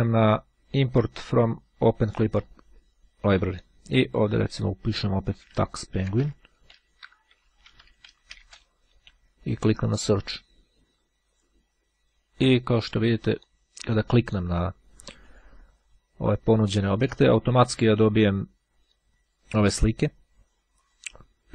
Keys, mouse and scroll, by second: 1.3-3.1 drag, 4.7 t, 5.4 e, 6.7 i, 8.4 n, 10.2 click, 13.1 click, 15.2 click, 17.7 click, 18.9-19.3 scroll down 1, 20.9 click.